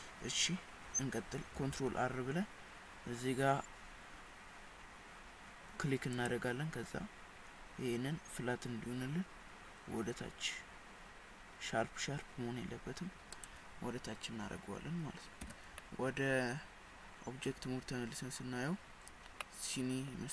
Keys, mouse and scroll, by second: 1.6 ctrl+r, 15.4 Tab, 15.8 middle click, 19.1-19.4 scroll down 6, 19.5 middle click.